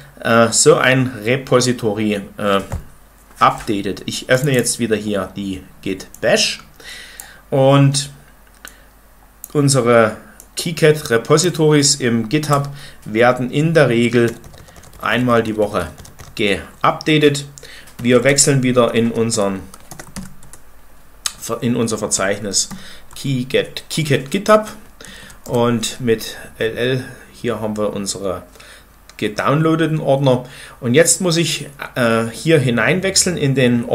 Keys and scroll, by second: 14.1 ctrl+=, 14.3-16.6 ctrl+=, 17.6-20.5 typing, 22.0-23.4 typing, 24.3 Return, 24.7-25.4 typing.